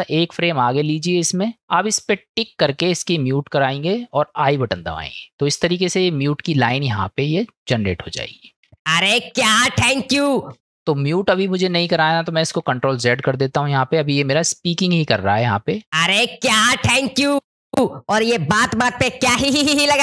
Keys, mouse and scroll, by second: 2.9 click, 7.7 middle click, 8.7 space, 10.5 space, 13.1 ctrl+z, 15.1 click, 15.8 space, 17.4 space, 17.7 space.